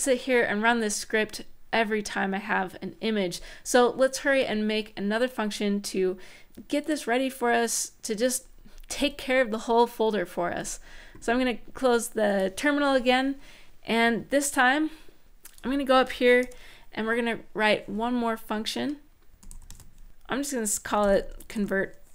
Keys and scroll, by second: 16.2 Return, 19.0-22.1 typing.